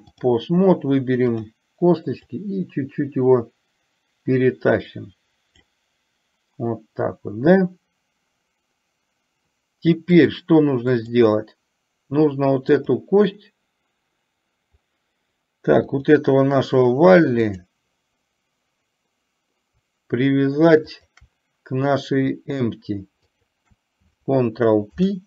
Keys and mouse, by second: 1.5 click, 2.5-5.7 drag, 10.4 click, 12.9 click, 16.1 click, 17.6 click, 21.0 shift+click, 23.6 shift+click, 25.0 ctrl+p.